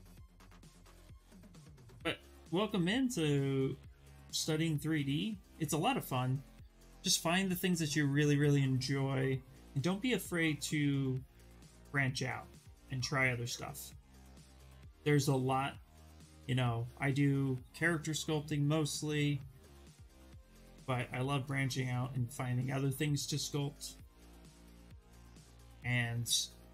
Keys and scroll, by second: 8.1 s.